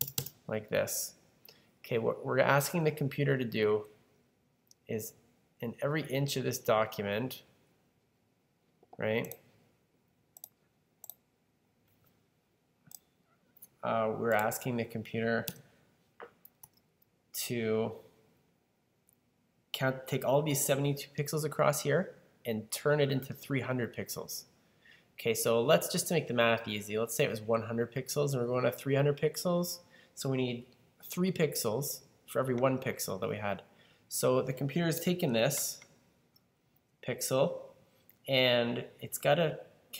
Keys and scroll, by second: 0.0-0.6 typing, 16.5 super+d.